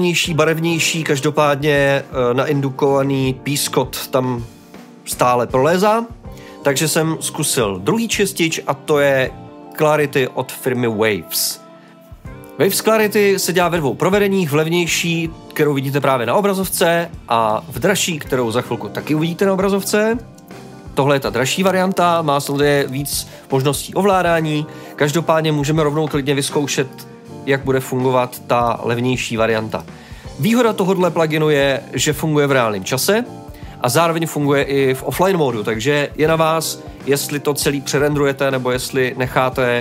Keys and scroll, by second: 20.6-21.5 typing.